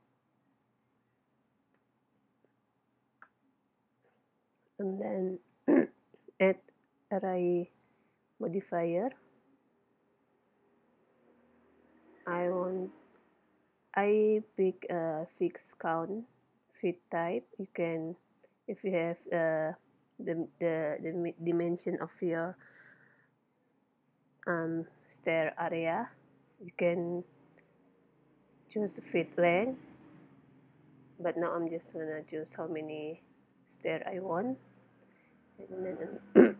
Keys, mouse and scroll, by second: 0.6-2.3 drag, 5.9-7.6 drag, 12.1-13.9 drag, 17.8-19.5 drag, 30.7-32.3 drag, 34.3-36.0 drag.